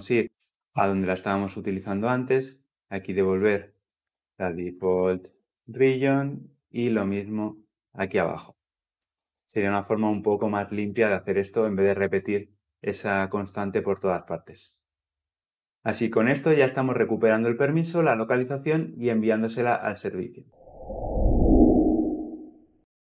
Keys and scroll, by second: 5.9 Return, 7.0 Return, 10.1 Return, 10.8 ctrl+alt+o.